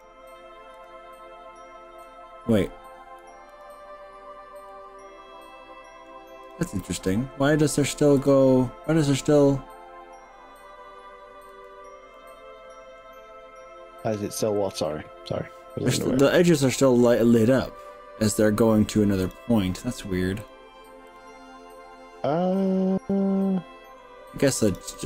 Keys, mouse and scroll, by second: 0.0 ctrl+shift+drag, 0.8 ctrl+shift+click, 2.4-3.0 scroll up 3, 3.6 shift+click, 4.7-6.2 shift+middle drag, 6.6 shift+click, 8.2 shift+click, 11.6 shift+click, 12.1-13.0 shift+middle drag, 14.6 shift+click, 16.7-18.4 shift+middle drag, 17.0 shift+click, 19.4 shift+click, 20.4 shift+drag, 21.2 shift+click, 22.6 shift+click, 23.1-24.0 shift+middle drag, 24.8 shift+click, 24.9-25.0 shift+middle drag.